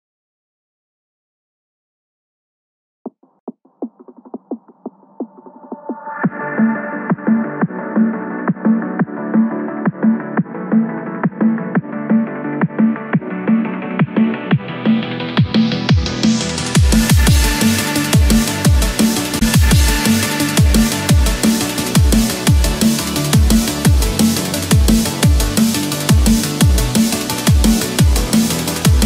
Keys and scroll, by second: 0.0 Return, 0.7 Escape, 2.6 ctrl+z, 3.4 Escape, 14.0 Return, 14.6 Escape, 22.4 Return, 23.1 Escape, 25.5 ctrl+-, 26.4 ctrl+=.